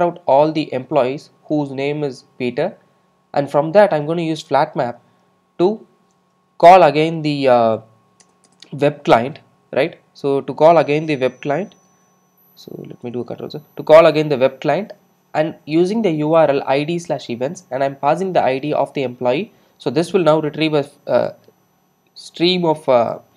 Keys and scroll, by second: 8.3 alt+Return, 11.9 alt+Return, 13.2 super+z.